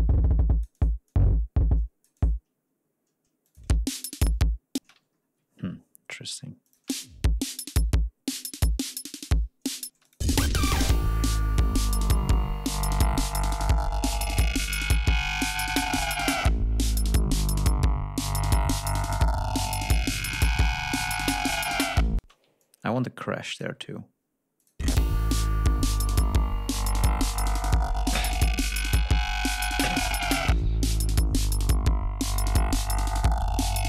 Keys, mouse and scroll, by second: 1.0-2.4 drag, 3.4 click, 3.5 space, 4.0-4.3 scroll up 2, 4.7 space, 5.1 ctrl+scroll down 2, 5.4-5.7 ctrl+scroll up 2, 6.6 click, 6.8 space, 9.8 space, 9.9 click, 11.5-11.8 scroll down 2, 12.0-12.4 scroll down 2, 13.7 ctrl+scroll up 2, 14.0 ctrl+scroll down 2, 14.2 ctrl+click, 15.2-15.9 ctrl+scroll down 4, 16.1-16.9 scroll down 4, 17.2-17.9 scroll down 4, 18.1-18.4 scroll up 4, 18.4-18.8 scroll down 2, 18.9-19.8 scroll up 4, 20.4 ctrl+click, 21.7 click, 21.7 g, 22.1 space, 22.5 ctrl+click, 24.5 click, 24.7 space, 25.3-26.0 ctrl+scroll down 4, 26.5-27.1 scroll up 4.